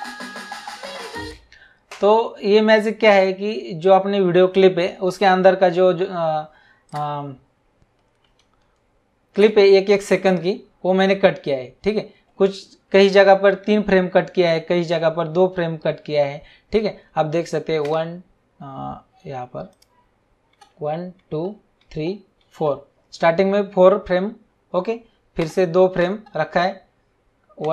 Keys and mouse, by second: 1.2 space, 3.1 click, 6.9 click, 9.3 Right, 17.8 Right, 19.7 click, 20.5 Right, 25.4 Right, 27.6 Right.